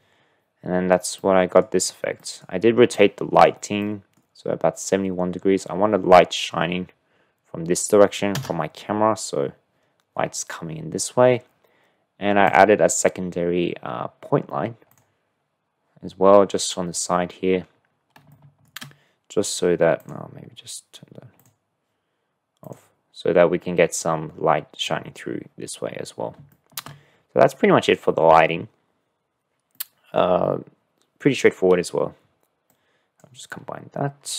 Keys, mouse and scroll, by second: 0.0 ctrl+space, 1.2 click, 1.4 middle click, 3.1 click, 3.8 click, 8.3 KP_0, 12.5 click, 18.5 shift+click, 20.0 click, 21.5 click, 22.7 click, 26.6 shift+middle click, 27.2 middle click, 29.7 drag, 29.9 middle click, 32.8 click.